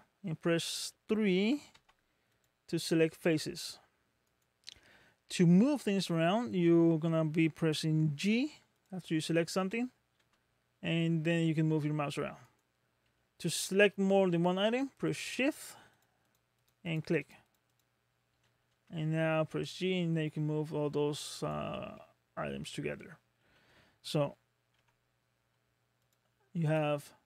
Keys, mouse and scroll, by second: 1.7 3, 2.3 click, 3.2 g, 5.3 middle click, 8.8 click, 10.3 g, 13.5 middle click, 15.1 shift+click, 15.6 shift+click, 16.0 shift+click, 16.3 shift+click, 16.6 shift+click, 16.9 shift+click, 17.2 shift+click, 17.4 shift+click, 17.7 shift+click, 18.8 g, 22.0 middle click, 24.8 1, 26.0 click, 26.7 click.